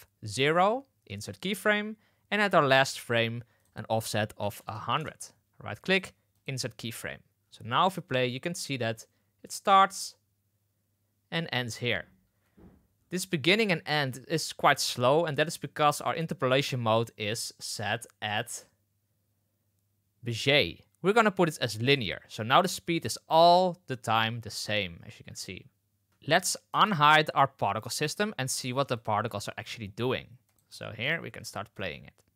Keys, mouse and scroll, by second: 2.3 click, 3.5-5.9 drag, 4.7 KP_0, 5.9 middle click, 7.4 space, 12.2 space, 22.4 space, 26.1 space, 26.6 space, 27.7 click, 28.9 click, 29.3 shift+middle drag, 30.4 middle click, 30.6 space, 31.0 middle click, 31.2 space, 31.7 space.